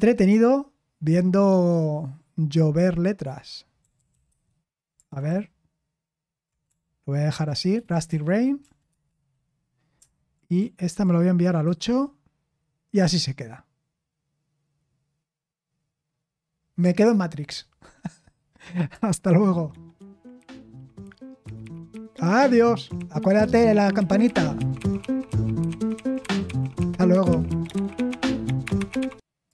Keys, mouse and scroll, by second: 6.6-7.6 typing, 8.9 Return, 10.6 super+l, 19.2 super+x.